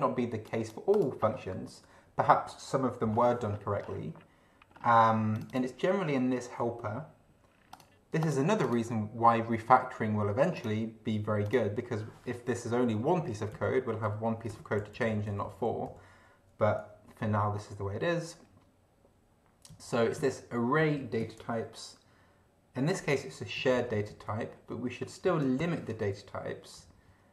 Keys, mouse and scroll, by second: 0.4 click, 1.2 click, 3.1-4.0 scroll up 3, 4.7 scroll up 1, 5.4 click, 6.0 scroll down 1, 7.7 click, 8.2 click, 8.6 click, 10.6 click, 11.4 click, 13.2 Down, 13.5 Up, 14.0 Home, 14.5 End, 14.8 ctrl+Left, 17.5 Down, 19.7 Up, 20.2 Right, 23.6 ctrl+alt+Right, 25.6 ctrl+alt+b, 26.8 Down.